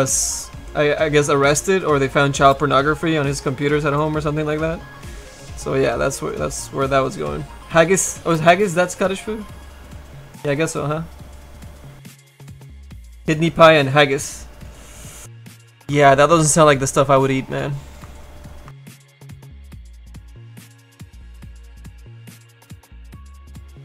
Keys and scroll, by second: 22.9 s, 23.3 s.